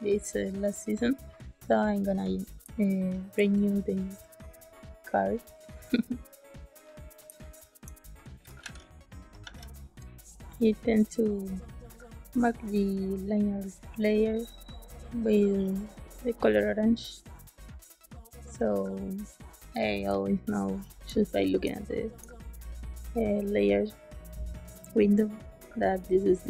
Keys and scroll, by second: 2.6 space, 7.2 space, 8.5 shift+s, 9.4 shift+s, 20.0 space, 21.6 space.